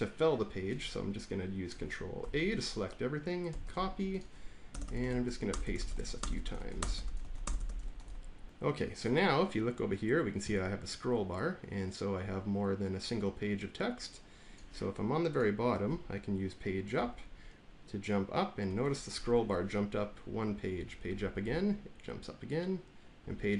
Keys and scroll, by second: 2.1 ctrl+a, 3.4 ctrl+c, 4.6 Return, 4.7 Return, 5.0 ctrl+v, 5.4 Return, 5.5 Return, 5.8 ctrl+v, 6.1 Return, 6.2 Return, 6.5 ctrl+v, 6.7 Return, 6.8 Return, 7.1 ctrl+v, 7.3 Return, 7.5 Return, 7.7 ctrl+v, 8.4 ctrl+v, 16.9 Page_Up, 21.0 Page_Up, 23.1 Page_Up.